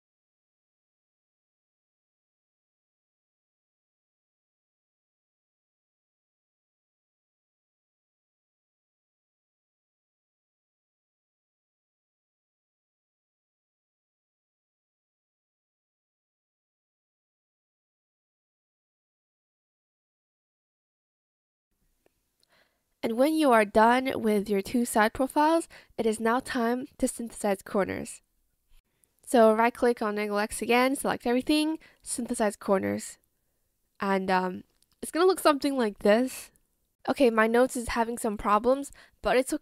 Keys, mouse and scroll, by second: 0.2 shift+click, 0.3 ctrl+shift+z, 0.3 shift+click, 0.6 shift+Escape, 2.4 shift+click, 3.0 shift+click, 8.3 ctrl+z, 8.6 click, 8.6 b, 8.8 shift+click, 8.9 shift+click, 9.5 Return, 10.0 Escape, 10.7 shift+click, 11.4 shift+click, 12.1 ctrl+z, 12.2 click, 12.6 click, 12.7 ctrl+z, 12.8 ctrl+z, 14.1 shift+click, 14.9 ctrl+z, 15.0 ctrl+z, 15.8 shift+click, 15.8 b, 15.8 shift+click, 16.0 ctrl+shift+z, 16.1 shift+click, 17.5 ctrl+z, 17.8 shift+click, 17.9 shift+click, 18.2 shift+click, 18.5 Return, 19.5 ctrl+shift+z, 19.5 shift+click, 20.2 shift+click, 21.4 shift+click, 21.7 ctrl+z, 21.7 shift+click, 21.7 shift+click, 21.8 shift+click, 22.0 shift+click, 22.2 shift+click, 22.7 shift+click, 23.1 Return, 23.5 Escape, 33.3 Escape.